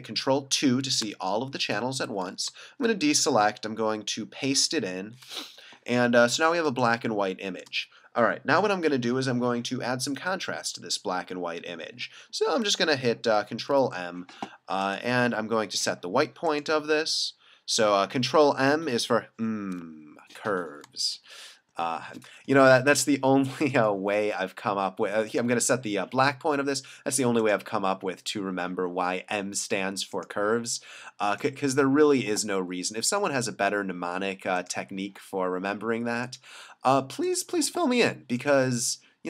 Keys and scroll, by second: 1.0 super+2, 2.5 super+d, 4.6 super+v, 6.7 space, 13.3 super+m, 21.2 super+=, 21.7 super+=, 22.8 space.